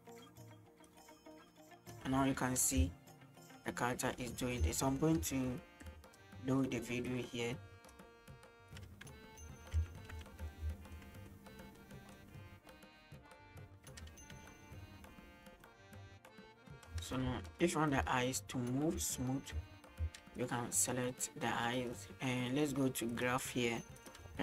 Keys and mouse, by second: 0.9-2.0 drag, 2.6 middle click, 2.8 space, 4.7 space, 5.3 space, 7.2 click, 7.2 space, 8.7 space, 9.8 n, 10.9 shift+middle click, 11.2 middle click, 11.9-12.3 middle drag, 15.2 middle click, 17.2 space, 18.0 space, 19.3 space, 19.5 space, 20.0 space, 20.5-21.8 drag, 21.8 right click, 23.1-24.2 drag.